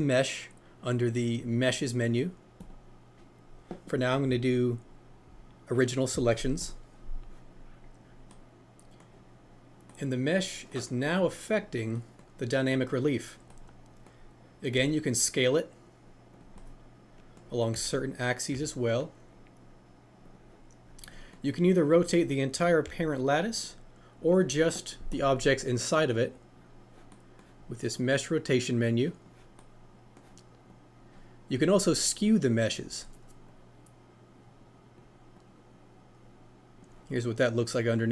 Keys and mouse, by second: 2.7-6.9 drag, 7.7-8.3 typing, 9.8 middle click, 9.9-10.7 typing, 12.7-13.8 typing, 22.0 click, 27.9-29.3 drag, 29.5 middle click, 30.7-32.0 drag, 33.6-35.0 drag, 35.5-36.8 drag.